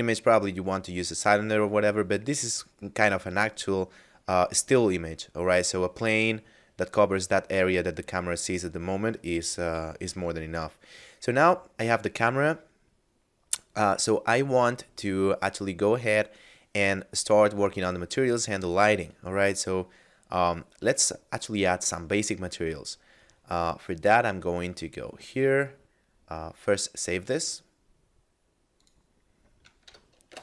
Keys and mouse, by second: 17.2 right click, 19.0 a, 20.8 right click, 22.3 middle click, 24.1 click, 26.8 click, 28.7 click, 29.9 KP_Add.